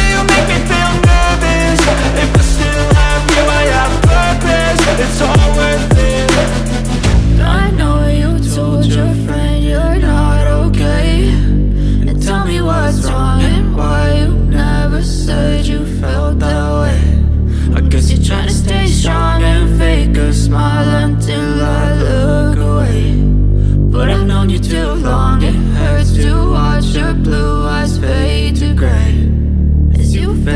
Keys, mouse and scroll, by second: 0.0-2.8 typing, 6.6-7.5 typing, 8.9 2, 9.1 Tab, 9.9-11.3 typing, 16.9 double click, 20.9-21.7 typing, 26.7-27.7 typing.